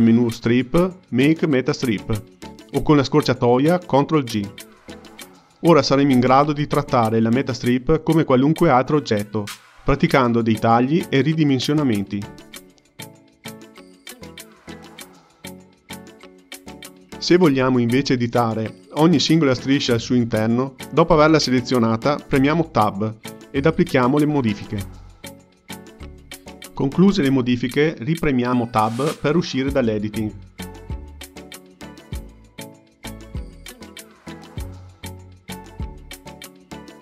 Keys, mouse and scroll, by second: 0.2 click, 7.4-8.4 drag, 8.4 k, 8.7 click, 9.0 k, 9.2 click, 9.6 click, 10.2 k, 10.7 k, 10.9 click, 11.1 k, 11.5 click, 11.8 k, 12.3 ctrl+middle click, 13.2 click, 13.4-15.2 drag, 15.2 ctrl+middle click, 16.0-17.1 drag, 20.4 click, 22.0 Tab, 23.5 click, 24.9 g, 28.4 Tab, 30.0 click, 30.7 Tab, 31.3 Tab, 31.6 click, 31.9 Tab, 32.3 Tab, 32.6 click, 32.8 Tab, 33.3 Tab, 33.6 click, 33.8 Tab, 34.9 Tab, 36.6 click, 36.8 click.